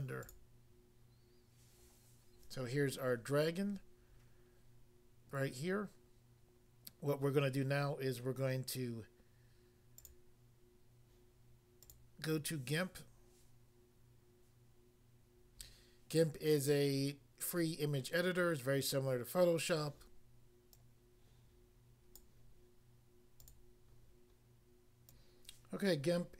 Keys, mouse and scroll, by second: 0.3 click, 10.0 click, 12.0 click, 20.8 click, 22.2 click, 23.4 click, 23.5 click.